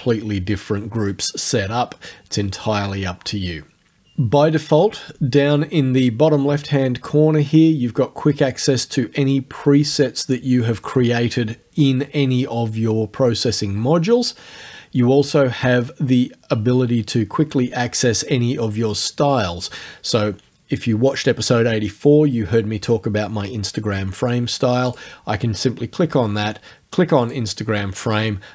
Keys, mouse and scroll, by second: 24.9 click, 27.3 click.